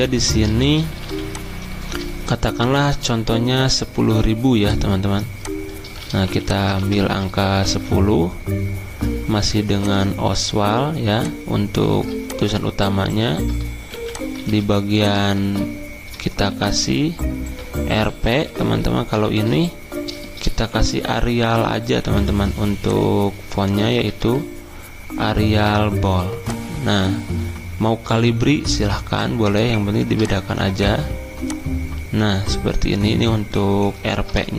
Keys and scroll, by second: 6.2 t, 6.8 ctrl+a, 7.4-8.2 typing, 13.9 t, 14.4 ctrl+a, 15.4 ctrl+a, 16.1 Caps_Lock, 17.7-19.6 typing, 20.7 ctrl+t, 22.0 ctrl+t, 23.5-24.7 typing, 34.4 ctrl+a.